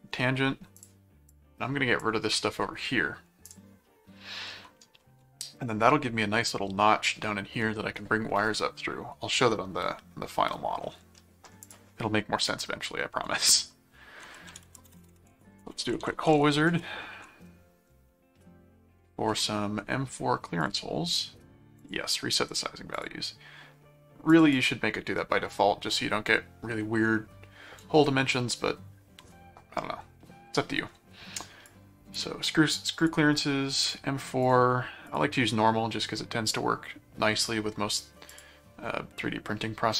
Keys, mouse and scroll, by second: 0.7 click, 3.5 click, 4.5-5.6 middle drag, 5.9 middle click, 11.1 middle click, 11.6 click, 14.0-16.9 typing, 17.1 ctrl+5, 19.1 ctrl+5, 20.6 click, 21.8 click, 22.9 click, 23.8 scroll down 2, 24.0-24.4 scroll up 2, 24.3 click, 25.0-25.4 scroll down 4, 25.4 scroll up 2, 26.6 scroll up 2, 31.7 click, 33.0 click, 33.8 click, 34.5 click, 35.0 click, 37.4 click, 38.3 click, 39.9 click.